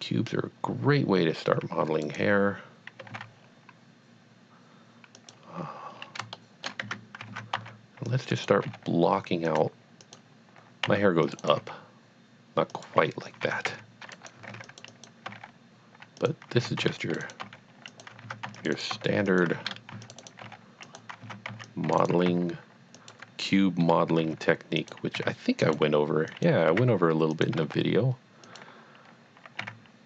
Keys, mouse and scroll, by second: 2.0 right click, 3.0 g, 3.1 z, 5.2 click, 5.9 scroll up 1, 6.4 shift+middle click, 6.8 Tab, 7.3 alt+a, 7.7 c, 8.1 click, 8.4 right click, 8.7 g, 9.1-9.5 scroll up 1, 9.6 click, 10.1 click, 10.9 c, 11.2 click, 11.4 right click, 11.5 g, 12.8 click, 13.7 c, 14.2 right click, 14.6 click, 14.9 double click, 15.3 g, 16.2 click, 16.6 alt+a, 17.0-20.4 typing, 17.1 click, 17.2 right click, 17.9 click, 18.6 click, 18.7 right click, 19.4 click, 20.2 right click, 20.9 click, 21.3 alt+a, 21.5 c, 21.7 click, 22.1 right click, 22.3 e, 23.0 click, 24.2 g, 25.0 click, 25.1 r, 26.1 g, 26.4 click, 26.7 e, 27.5 click, 27.6 g, 28.5 click, 29.6 r.